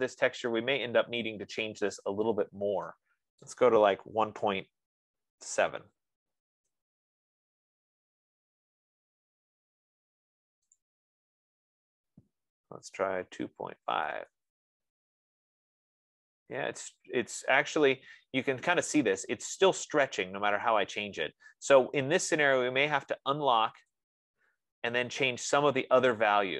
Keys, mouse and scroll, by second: 4.4-6.0 typing, 4.7-8.8 drag, 7.0 Tab, 11.3-16.1 drag, 12.9-14.1 typing, 24.3-26.5 drag.